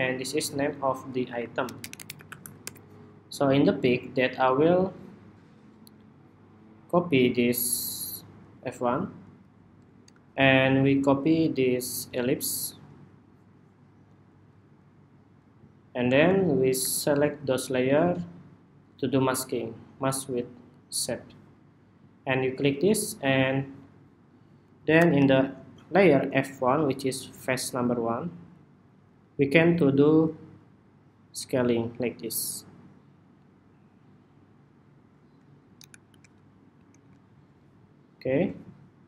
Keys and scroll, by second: 7.2 super+c, 7.4 super+c, 12.4 super+v, 25.3 super+-, 35.5 super+=, 35.8 super+=, 36.5 super+=, 36.8 super+=, 37.7 super+=.